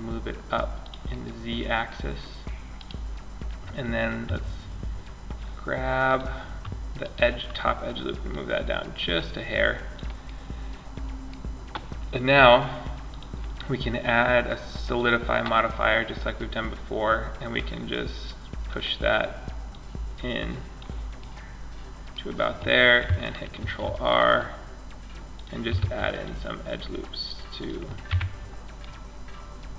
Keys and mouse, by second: 0.1 click, 0.3-0.6 drag, 2.0 right click, 3.4 Tab, 5.2 click, 8.0-9.1 drag, 9.1 right click, 9.4-10.7 middle drag, 12.3-14.1 drag, 15.3-20.4 drag, 20.4 middle click, 22.8 ctrl+r, 24.6 click, 25.0 ctrl+r, 27.3 Tab, 28.4 click, 28.6 click.